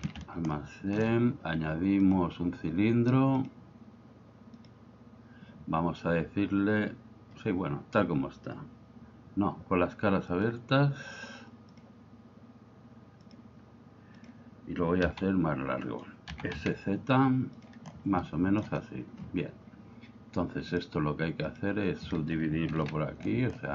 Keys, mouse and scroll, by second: 0.0 shift+c, 0.6 shift+middle click, 2.2-4.7 drag, 10.5 click, 11.7-13.4 drag, 14.2 click, 15.2 s, 15.9 right click, 16.3 s, 16.5 z, 17.6 click, 18.5 shift+middle click, 20.8-21.7 drag, 22.7 ctrl+r.